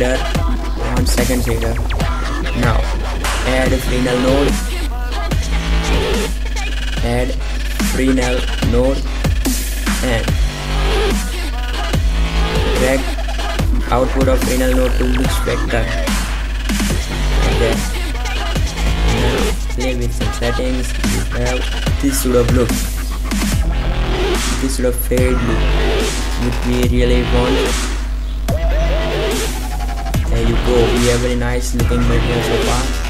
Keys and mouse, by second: 3.7 right click, 3.7 click, 4.4 g, 8.3 shift+a, 13.5-15.3 drag, 19.0 middle click, 22.0 click, 27.2 shift+z, 27.8 shift+z.